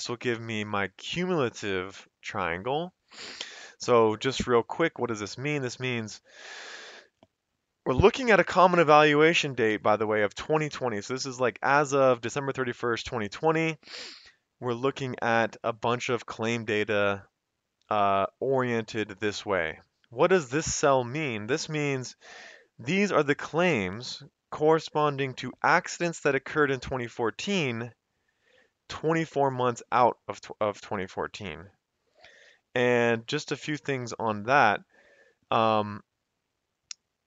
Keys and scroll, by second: 0.0-0.6 typing, 1.1 Escape.